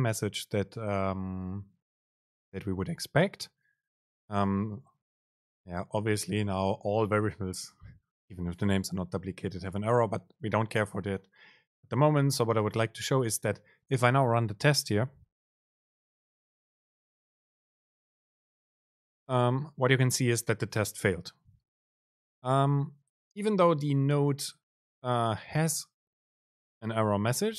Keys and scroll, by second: 18.0 super+r.